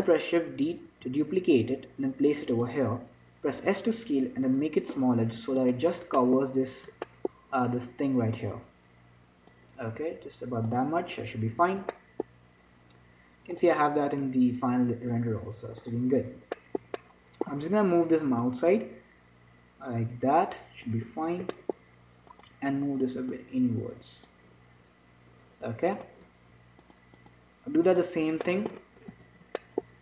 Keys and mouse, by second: 1.2 shift+d, 3.9 s, 6.5-10.5 drag, 10.2 s, 11.4-14.0 middle drag, 16.9-18.7 middle drag, 17.8 z, 18.7-21.0 drag, 21.8-24.5 middle drag, 22.6-25.6 drag, 26.3-27.4 right drag, 27.1 click, 28.2-29.4 drag, 29.4-30.0 middle drag, 29.4 z.